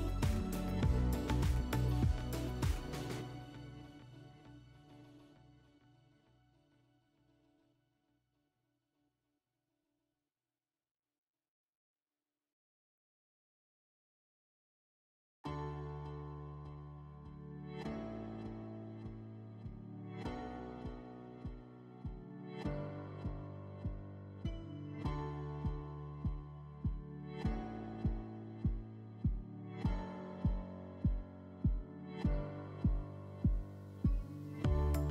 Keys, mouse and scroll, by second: 12.0-13.1 drag, 14.9 click, 16.3 click, 18.4 right click, 19.1 right click, 21.7-23.0 drag, 23.9-25.4 drag, 30.2 alt+middle click.